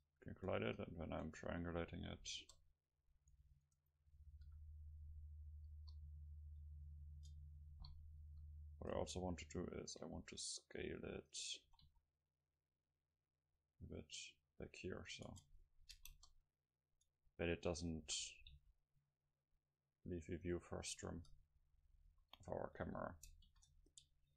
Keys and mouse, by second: 1.3 Tab, 1.8 click, 2.4 KP_0, 3.7 Tab, 4.5 a, 5.8 KP_0, 7.2 Tab, 8.3 KP_7, 9.0 Tab, 10.1 c, 11.5-13.3 right drag, 11.7 s, 15.3 Tab, 15.3-17.2 drag, 16.2 KP_0, 17.2 middle click, 17.7 Tab, 18.1 s, 21.2-23.5 drag, 21.2 Tab, 22.1 a, 22.9 a, 23.5 ctrl+s.